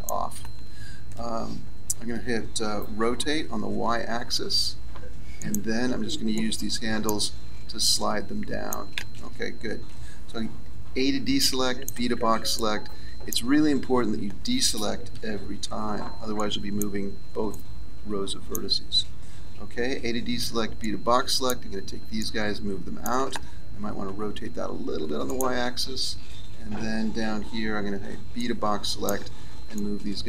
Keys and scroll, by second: 3.0 r, 9.8 a, 15.1 a, 19.3 a, 24.0 r, 26.9 a.